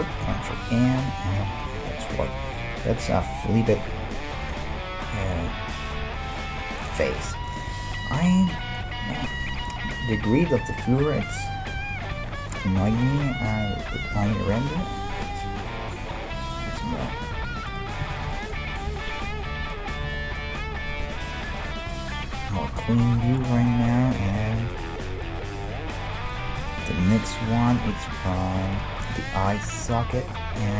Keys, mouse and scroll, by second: 0.3 ctrl+n, 3.8 KP_5, 5.4 middle click, 10.0-16.3 middle drag, 12.1-15.8 drag, 16.5-21.4 middle drag, 17.7-19.9 right drag, 18.9 KP_1, 21.4 KP_Decimal, 24.9-28.6 middle drag, 27.5 e, 28.0 s, 29.0 middle click.